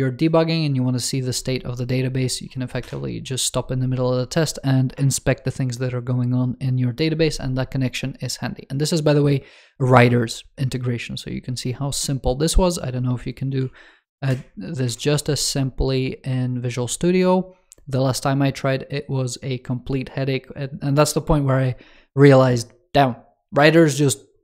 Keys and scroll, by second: 14.2 super+7, 14.7 super+1.